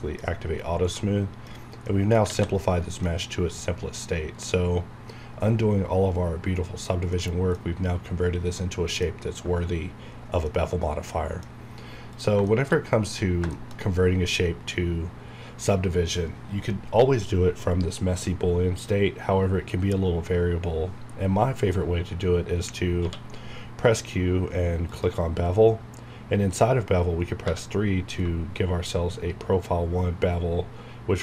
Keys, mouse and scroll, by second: 1.5-1.8 scroll down 1, 1.8 middle click, 2.4 alt+a, 3.0 middle click, 4.1 scroll up 1, 4.8 scroll up 1, 6.4 scroll down 1, 7.1-10.2 middle drag, 10.2 scroll down 1, 10.4 middle click, 11.7 scroll up 1, 12.1 click, 12.4 shift+middle click, 12.7 shift+scroll up 1, 13.2 scroll down 1, 13.5 shift+middle click, 14.8 scroll down 1, 15.3 scroll up 1, 17.9-18.8 scroll down 1, 18.8 scroll up 1, 23.0 q, 24.9 click, 27.4 3.